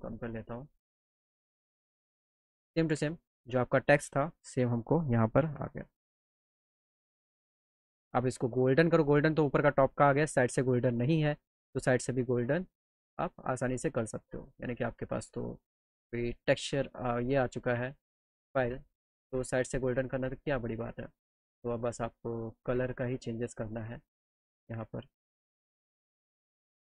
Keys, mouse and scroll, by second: 2.2 click, 4.7 click, 8.6 click, 13.6 click, 15.4 click, 17.4 click, 20.0 click, 24.0 click, 25.3 click, 25.8 click, 26.3 click.